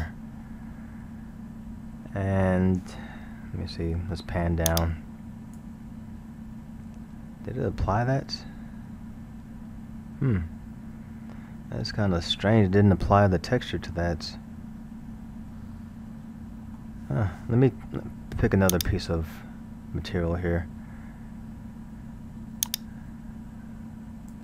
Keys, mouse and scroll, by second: 2.4 scroll, 4.7-6.0 drag, 6.0-6.7 scroll, 11.5-12.8 middle drag, 12.8 scroll, 13.9-17.0 middle drag, 18.7-19.1 drag, 22.7-24.4 drag.